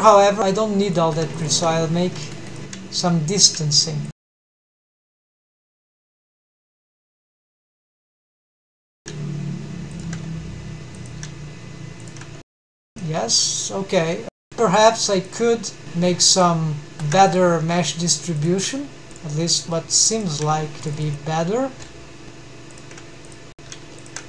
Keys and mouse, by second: 0.7 1, 1.1 drag, 1.5 g, 2.1 Escape, 3.6 g, 4.5 shift+click, 5.1 click, 5.3 g, 6.1 shift+click, 7.0 click, 7.2 g, 7.7 shift+click, 8.7 click, 9.0 g, 9.7 shift+click, 10.8 click, 11.1 g, 11.8 shift+click, 12.5 Tab, 13.0 middle click, 14.1 Tab, 14.3 2, 14.4 shift+v, 15.2 shift+click, 15.5 shift+v, 16.7 shift+click, 17.0 1, 17.4 click, 17.6 g, 18.5 shift+click, 18.9 g, 20.0 shift+click, 20.2 click, 21.8 shift+g, 23.7 g.